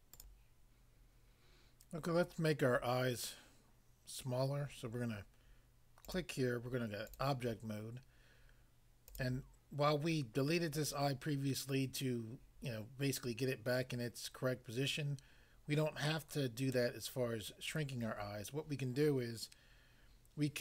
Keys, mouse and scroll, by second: 0.2 click, 6.0 click, 6.1 click, 7.1 click, 7.2 click, 9.1 click.